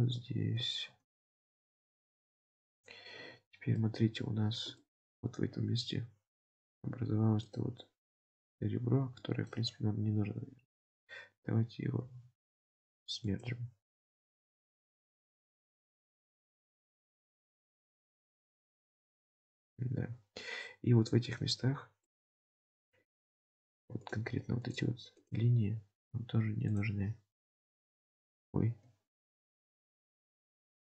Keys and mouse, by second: 0.0 Tab, 0.9 ctrl+r, 3.3 Tab, 3.8-4.4 middle drag, 4.3 Tab, 4.9 shift+middle click, 5.6 2, 6.5 1, 9.2 shift+middle click, 10.8 click, 16.1 click, 18.7 shift+middle click, 19.4-21.4 middle drag, 21.8 Tab, 22.1 middle click, 26.8-28.6 drag, 28.7 ctrl+z.